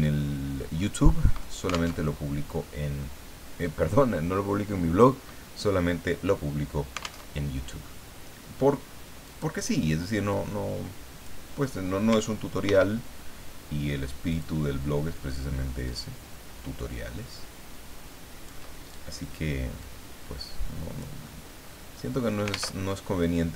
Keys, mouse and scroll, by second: 0.8 middle click, 1.9 alt+Tab, 7.3 alt+Tab, 9.2 click, 10.3-11.4 drag, 12.6 ctrl+d, 14.3 ctrl+click, 15.9-18.7 ctrl+drag, 19.8-21.1 drag, 21.4 click, 22.7 alt+Tab.